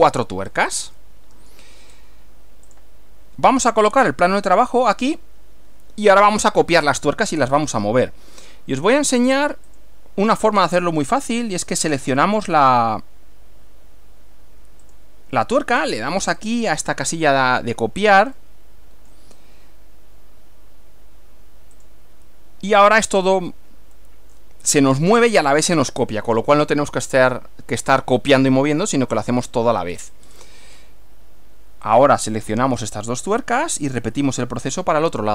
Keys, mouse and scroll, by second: 0.5-0.9 scroll up 1, 1.0-1.7 shift+middle drag, 1.9 shift+scroll up 1, 2.7 click, 4.1 click, 5.1 click, 6.1 scroll down 1, 9.7 click, 14.9 click, 16.5 click, 18.5 middle click, 21.8 click, 23.1 scroll down 1, 24.1 middle click, 26.1 click, 27.1-28.1 middle drag, 29.3-29.9 middle drag, 30.0 scroll down 1, 30.1 scroll up 1, 30.3 scroll down 1, 31.9 click, 34.1 ctrl+click.